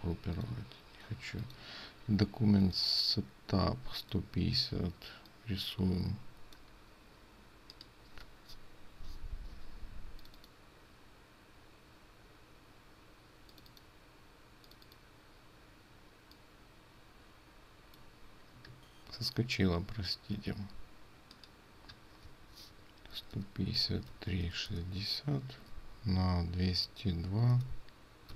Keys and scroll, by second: 22.5 ctrl+a.